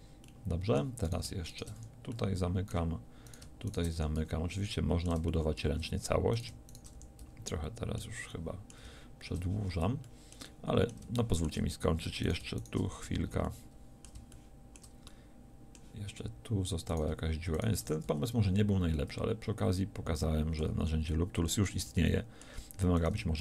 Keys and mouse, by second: 1.8 f, 4.0 f, 4.2 a, 7.0 f, 7.2 a, 12.8 f, 13.0 a, 17.8 f, 18.0 a, 21.0 middle click.